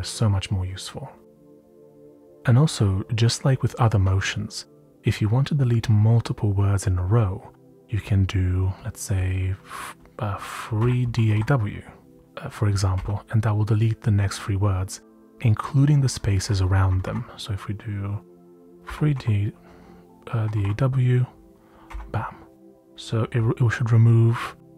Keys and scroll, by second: 0.0-0.2 typing, 8.4 typing, 10.5-11.8 typing, 12.9 typing, 15.0-17.3 typing, 18.6-21.8 typing.